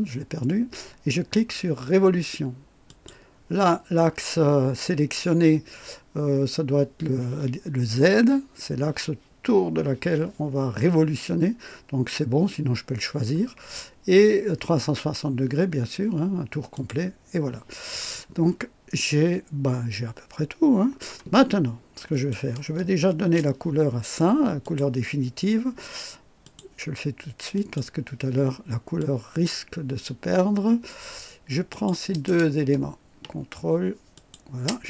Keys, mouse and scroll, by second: 2.8 click, 16.7 click, 18.1-21.2 drag, 22.1 click, 23.1 ctrl+d, 24.6 click, 26.4 click, 27.5 click, 29.0 click, 31.7 click, 34.2 ctrl+click.